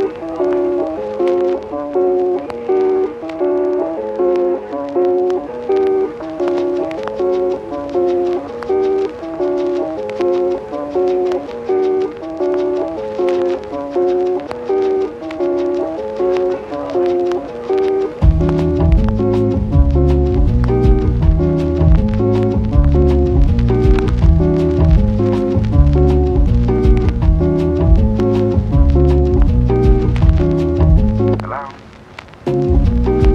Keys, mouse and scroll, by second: 0.0-0.6 typing, 1.1 ctrl+z, 1.6 s, 1.8 z, 4.5 shift+a, 5.6-6.8 typing, 7.8 g, 8.7 click, 8.9 g, 10.7 g, 10.8 u, 11.0 click, 11.1 g, 11.2 y, 12.2 Tab, 12.5 i, 13.1 g, 13.2 y, 14.4 click, 14.9 ctrl+r, 15.6 g, 15.7 y, 17.4 click, 17.8-19.6 typing, 20.4 middle click, 21.0 middle click, 21.3 s, 21.8 s, 22.3 g, 22.4 y, 23.5 g, 23.6 y, 23.9 Tab, 24.7 s, 24.7 click, 25.9 KP_1, 26.5 shift+d, 26.6 x, 28.2 Tab, 28.8 Tab, 29.2 Tab, 29.5 ctrl+r, 30.0 click, 30.2 s, 30.4 click, 30.8 Tab, 31.4 x, 31.8 KP_1, 32.5 shift+d, 32.9 x.